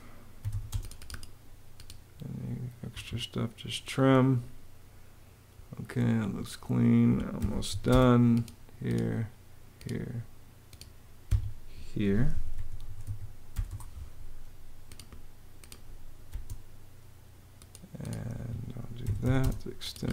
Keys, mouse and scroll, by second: 0.0-0.7 typing, 2.6 Escape, 7.1 m, 7.4 a, 7.5 space, 10.9 Escape, 12.0-13.7 typing, 15.9 space, 18.0 Escape, 18.5-20.1 typing.